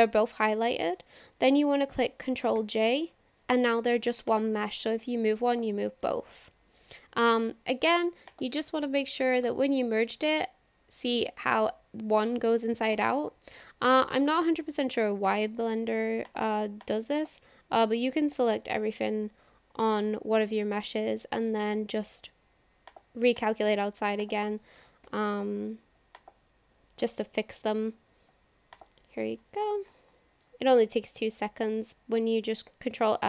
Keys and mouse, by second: 2.6 ctrl+j, 4.4-5.6 drag, 6.7 ctrl+z, 8.4-10.2 drag, 13.0 Tab, 14.4 click, 15.3 ctrl+l, 16.9 click, 18.3 ctrl+l, 21.7 alt+n, 23.4 click, 25.1 ctrl+l, 26.1 click, 27.0 ctrl+l, 27.9 alt+n, 30.2 middle click, 31.3 click, 32.7 ctrl+l.